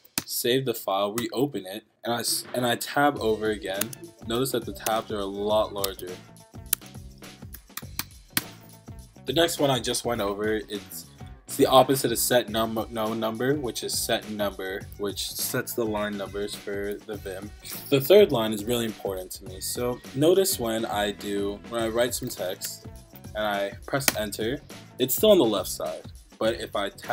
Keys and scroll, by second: 0.0-0.4 typing, 0.8 Up, 1.2 Return, 3.8 Tab, 4.8 Tab, 5.8 Tab, 6.7 Tab, 7.6 BackSpace, 8.0 BackSpace, 8.3 BackSpace, 17.6 Down, 22.0-23.2 typing.